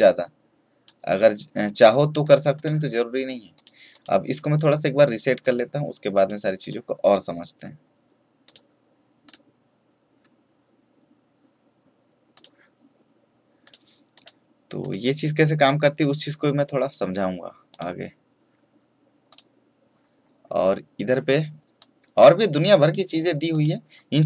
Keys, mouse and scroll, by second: 4.0 click, 12.3 click, 21.7 click.